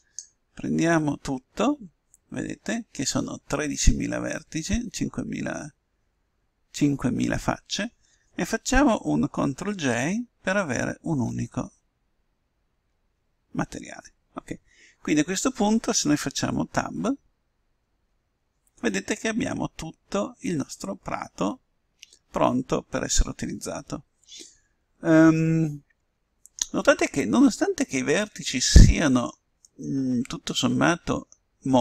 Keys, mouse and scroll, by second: 12.9 ctrl+j, 18.6 Tab, 19.6-21.4 middle drag, 22.7 middle click, 23.7 middle click, 28.1-31.8 middle drag.